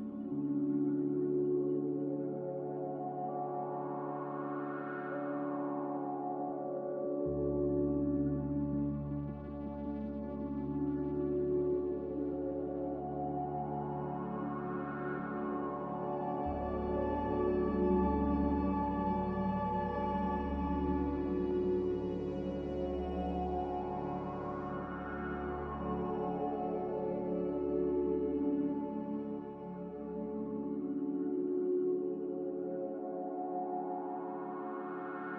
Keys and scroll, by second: 1.3 z, 3.1 typing, 6.1 x, 8.9 f, 9.5 a, 25.9 n, 33.2 z.